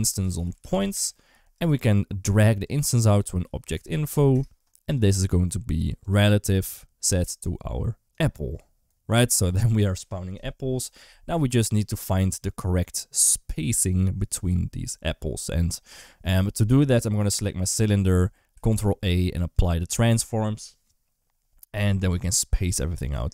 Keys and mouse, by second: 2.5-4.8 drag, 5.8 click, 18.5 ctrl+a, 23.1-23.3 shift+drag.